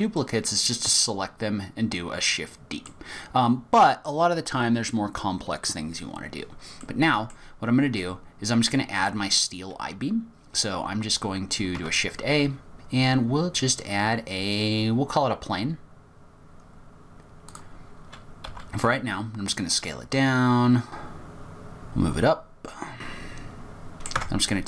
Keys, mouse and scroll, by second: 0.2 middle click, 2.9-3.4 scroll down 3, 3.4-3.9 scroll up 1, 3.9-4.6 scroll up 1, 6.8 middle click, 11.8 shift+a, 18.6 s, 21.6 g, 23.3 scroll up 6, 23.4 middle click, 23.6 g, 23.9 middle click, 24.2 Tab.